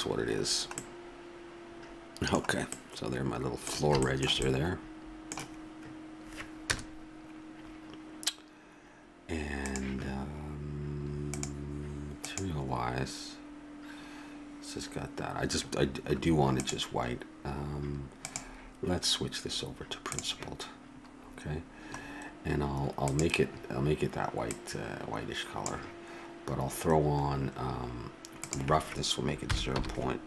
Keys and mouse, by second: 6.7 KP_0, 10.2-20.8 drag, 23.0-26.1 drag, 28.4-30.2 drag.